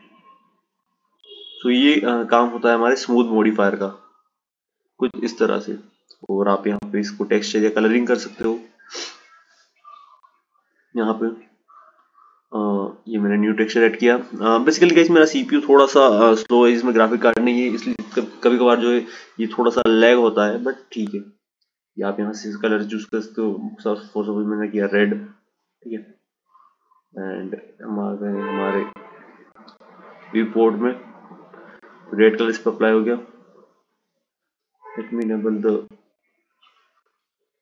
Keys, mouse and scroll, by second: 0.5 click, 4.4 click, 5.7-13.2 drag, 17.2 click, 27.4 click, 28.1 click, 30.5 click, 32.7-37.3 drag.